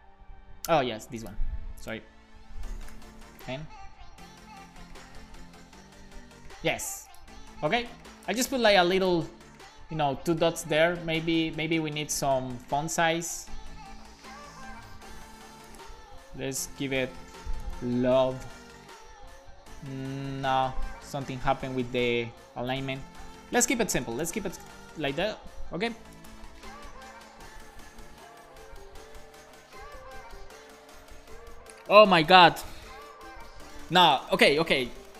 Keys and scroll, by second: 2.9 BackSpace, 3.2 super+s, 5.2 BackSpace, 5.3 1, 5.5 super+s, 14.1 shift+super+Left, 14.3 super+c, 16.4 super+v, 16.9 Left, 17.0 Left, 17.3 BackSpace, 17.7 l, 18.1 super+s, 23.8 shift+super+Right, 24.1 shift+super+Left, 24.5 BackSpace, 24.7 super+s.